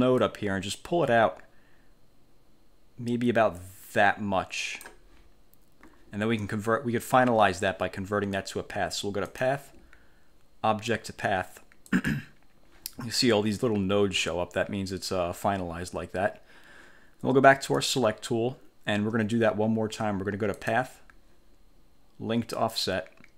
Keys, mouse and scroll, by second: 0.3-5.1 drag, 9.4 click, 12.0 click, 17.9 click, 20.7 click, 22.7 click.